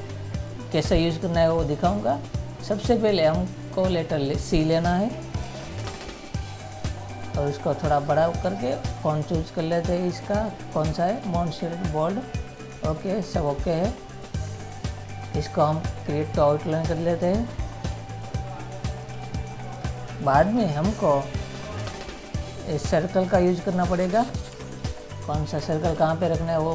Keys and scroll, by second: 20.6 ctrl++, 24.6 ctrl+-.